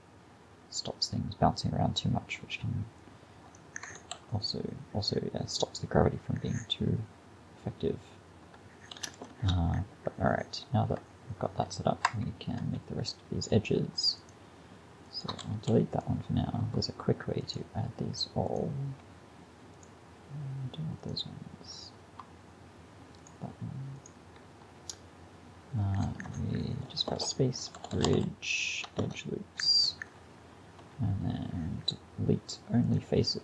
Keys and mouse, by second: 3.0-4.7 drag, 4.0 alt+a, 9.0 alt+a, 9.4 shift+Left, 12.1 Tab, 15.5 x, 27.1 space, 30.8 x.